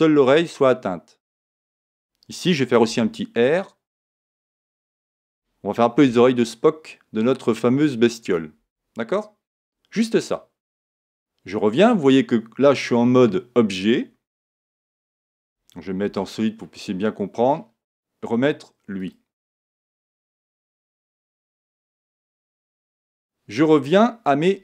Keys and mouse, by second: 1.8 click, 2.9 r, 6.0 g, 8.3 click, 10.8 Tab, 14.5 a, 20.5 click, 23.0 click.